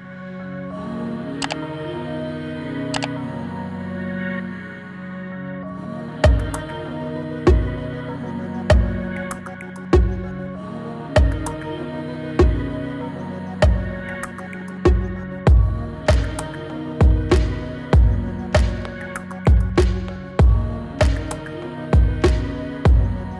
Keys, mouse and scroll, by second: 0.1 click, 1.9 Return, 6.8-9.1 drag, 11.6 space, 16.4 space, 17.1-17.8 drag, 18.9-20.6 scroll down 1, 22.0-22.6 drag.